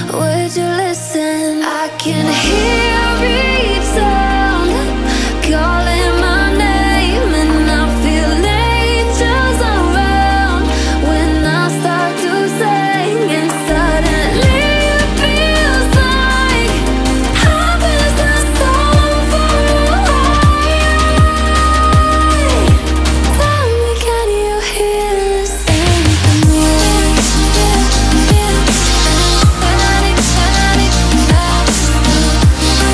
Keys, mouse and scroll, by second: 0.2 ctrl+shift+[, 0.7 ctrl+], 1.7 alt+scroll up 2, 2.1-4.7 drag, 4.7 alt+scroll down 1, 4.9-7.3 drag, 8.4-9.2 alt+scroll down 1, 9.4 alt+scroll up 1, 9.6 click, 10.8 alt+scroll down 1, 11.1-11.7 alt+scroll up 1, 12.0 alt+scroll up 1, 12.4-14.1 drag, 14.7 alt+scroll down 1, 14.9 alt+scroll up 1, 15.3 click, 16.3-22.6 alt+drag, 22.6-23.0 alt+scroll down 1, 23.2 alt+scroll up 1, 24.0 click, 26.2 click, 29.6-30.2 alt+scroll up 1, 32.4-32.9 drag.